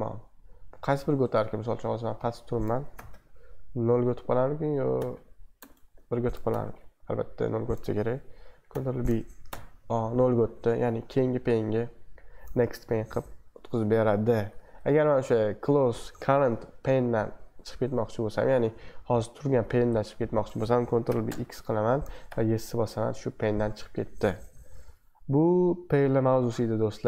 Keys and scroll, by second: 2.9 ctrl+b, 3.1 q, 4.7-6.6 typing, 6.5 ctrl+b, 8.7 b, 9.5 o, 10.5 super+2, 14.5 super+1, 21.1 ctrl+b, 21.2-22.7 typing, 24.6 super+2, 24.9 super+1, 25.2 super+2.